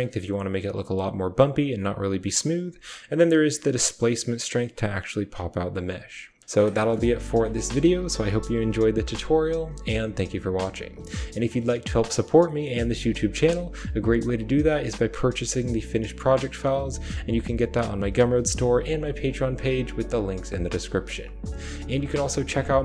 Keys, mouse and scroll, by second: 2.7-5.3 shift+drag, 6.4 click, 6.4-8.6 typing, 6.6 click, 12.3 click, 20.4 click, 20.4 typing.